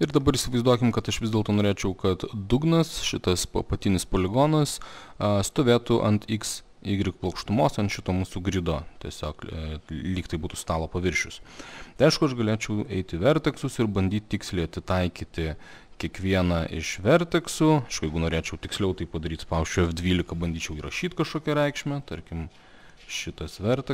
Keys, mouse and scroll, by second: 0.2 middle click, 1.1 alt+middle click, 5.0 middle click, 7.6 alt+middle click, 10.7 click, 12.1 alt+middle click, 12.9 click, 14.1 click, 15.7 click, 16.5 click, 16.8 click, 18.4 click, 19.8 F12, 21.7 click, 22.2 click, 23.0 click.